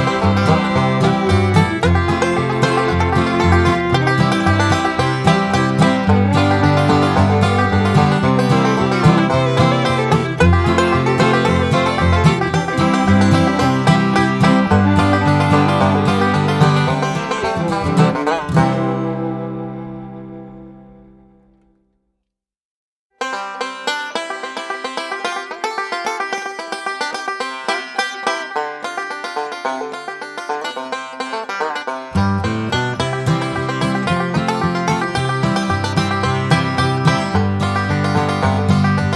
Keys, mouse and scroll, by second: 0.2 click, 0.8 Escape, 1.3 click, 2.5 click, 3.7 click, 6.6 click, 7.4-8.9 typing, 9.1 click, 10.8 click, 12.1 click, 12.9 click, 14.2 click, 15.1 Escape, 15.5 click, 17.0 click, 18.7 click, 19.4 click, 20.6 ß, 20.9 1, 21.4 5, 22.2 click, 23.8 click, 25.0 click, 25.9 click, 26.8 click, 27.5 Escape, 28.0 click, 28.5-29.1 scroll down 4, 29.1 scroll up 2, 30.0 click, 31.3 click, 32.3 click, 33.1-34.6 typing, 34.7 click, 36.4 click, 37.6 click, 38.5 click.